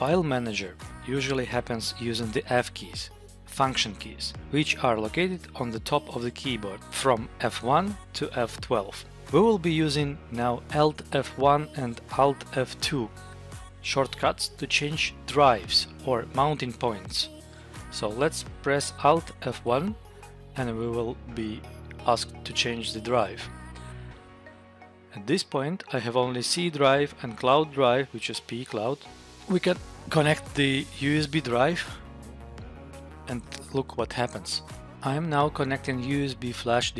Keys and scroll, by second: 19.5 alt+F1, 22.4 Down, 25.0 Up, 27.0 Down, 28.0 Up, 28.4 Down, 29.3 Up.